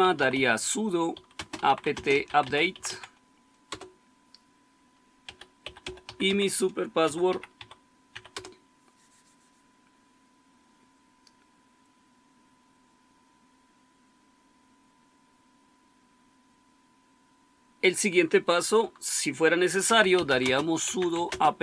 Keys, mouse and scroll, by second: 0.0-3.4 typing, 3.6 Return, 4.9-8.7 typing, 19.5-21.6 typing.